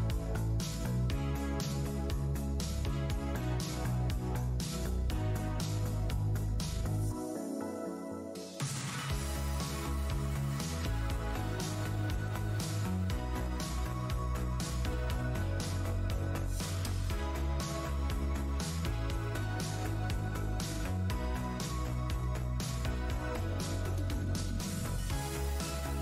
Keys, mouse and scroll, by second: 0.3 shift+Tab, 1.7 space, 2.7 alt+Tab, 2.8 alt+scroll up 1, 3.1 `, 3.6 alt+click, 3.7 alt+Tab, 4.1 alt+click, 4.4 alt+scroll up 1, 5.2-5.7 alt+scroll up 1, 5.2 v, 6.2 v, 6.2 scroll down 1, 7.3 click, 7.6 Tab, 7.7 w, 8.2 Tab, 8.5 click, 9.8 Tab, 10.2-10.9 scroll down 1, 10.9 Tab, 12.0 alt+click, 12.3 Tab, 14.5 w, 14.5-15.4 scroll down 1, 15.4 Tab, 16.0 alt+click, 16.1 alt+Tab, 16.7 alt+click, 16.9 alt+scroll down 1, 17.7 alt+scroll, 17.7 click, 17.9-18.3 scroll down 1, 18.7 alt+shift+w, 18.8-19.6 alt+scroll down 1, 19.6 scroll up 1, 20.5 alt+click, 21.0 Tab, 21.5 click, 21.9 alt+Tab, 22.4 alt+Tab, 22.6 shift+scroll, 22.8-23.2 scroll up 1, 22.8 shift+d, 23.5 Tab, 24.8-25.4 alt+scroll down 2, 25.3 shift+d, 25.5 shift+Tab.